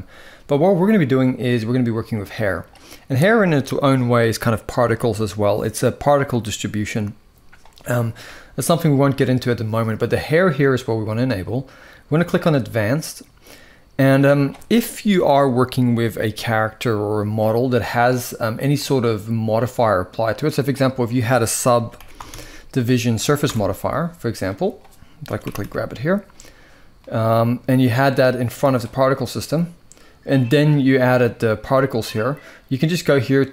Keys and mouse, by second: 2.0 click, 12.1 click, 18.5 click, 20.4-26.9 drag, 27.8-28.5 drag.